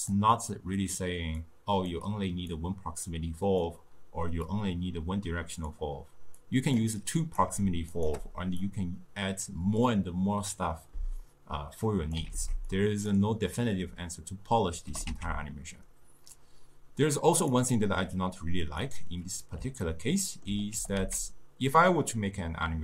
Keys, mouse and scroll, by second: 1.5-2.6 drag, 4.5 click, 6.5 click, 7.3 click, 8.0 shift+click, 11.9-12.4 drag, 12.4 ctrl+x, 12.8 click, 15.0 g, 18.9 click, 19.9-20.8 ctrl+middle drag, 20.8 g.